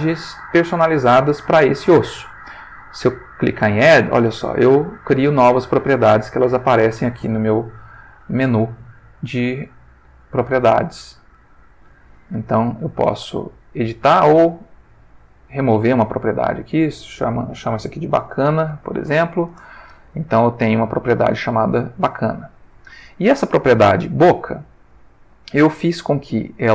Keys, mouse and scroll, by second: 3.4 click, 4.0 click, 4.9 click, 5.4 click, 7.9 n, 10.9 n, 13.0 click, 13.7 click, 14.6 click, 15.6 click, 16.6 click, 17.9-18.6 typing, 19.1 shift+Return, 22.4 click, 24.9 click.